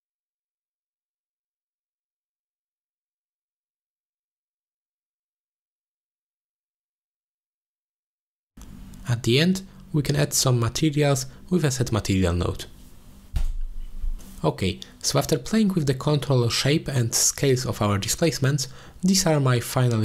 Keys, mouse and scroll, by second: 0.4 click, 3.2 ctrl+space, 4.4-4.7 middle drag, 5.3-5.8 middle drag, 6.4-6.9 shift+middle drag, 7.1-8.5 middle drag, 8.5 ctrl+space, 8.5 click, 9.1 shift+a, 14.1-15.8 drag, 16.3 click, 17.3 middle click.